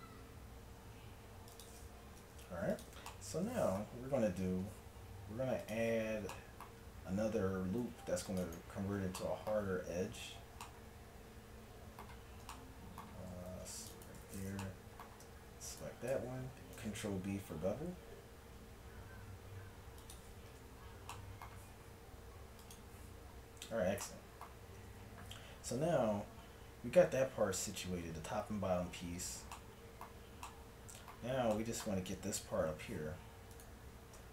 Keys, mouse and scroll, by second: 2.2 ctrl+Tab, 3.1-4.1 drag, 4.1 a, 5.4-6.4 middle drag, 6.4 click, 7.8 ctrl+r, 13.5 ctrl+r, 16.8 ctrl+b, 20.6 Tab, 22.6 click, 23.7 Tab, 24.8 Tab, 33.6 click, 34.2 Tab.